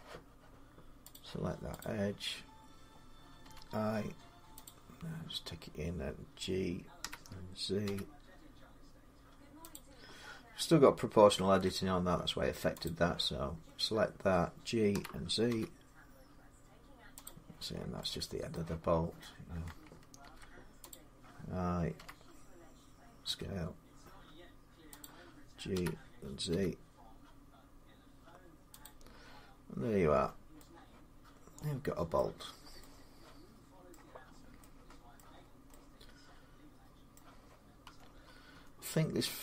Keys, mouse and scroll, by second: 0.9 click, 1.6 click, 3.2 i, 4.4 click, 6.8 g, 7.6 z, 9.5 click, 11.1 ctrl+z, 12.6 click, 14.7-15.3 typing, 17.0 click, 17.5 scroll, 17.6 scroll down 3, 17.6 z, 18.3 middle click, 21.7 click, 21.7 |, 21.9 middle click, 21.9 i, 23.0 s, 24.8 click, 25.5-26.3 typing, 27.5 g, 28.6 click, 29.9 Tab, 30.5 z, 31.9 scroll up 1, 32.1-32.6 scroll down 6, 32.6 middle click, 33.7 middle click, 34.0-34.4 scroll down 3, 35.0 middle click, 35.2-35.5 scroll down 2, 35.5 scroll, 36.9 middle click, 37.6 Tab, 38.3 Tab, 39.0-39.4 scroll down 4.